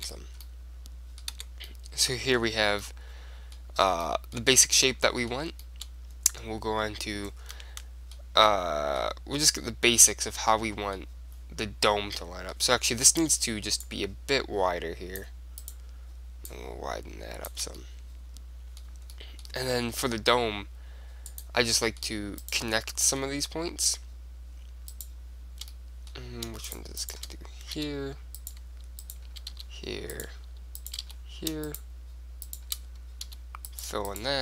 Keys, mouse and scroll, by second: 0.2 Tab, 1.5 Tab, 4.3-10.2 middle drag, 10.8 middle click, 12.3-14.0 middle drag, 13.3-14.7 drag, 14.0 right click, 14.7 middle click, 15.0 click, 15.8 right click, 16.6 middle click, 17.4-18.5 drag, 18.5-21.6 middle drag, 21.4-23.3 drag, 21.9 middle click, 22.5-24.2 right drag, 23.3-24.6 middle drag, 25.0-26.7 right drag, 26.0-27.5 middle drag, 27.5-34.4 right drag, 28.0 f, 29.6 f, 31.2 f, 33.4 f.